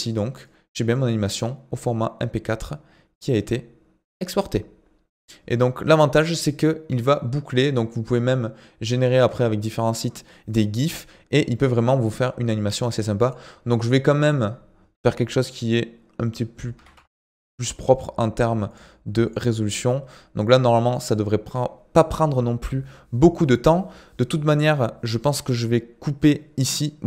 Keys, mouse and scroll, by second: 14.3-17.3 drag, 18.7-22.0 drag.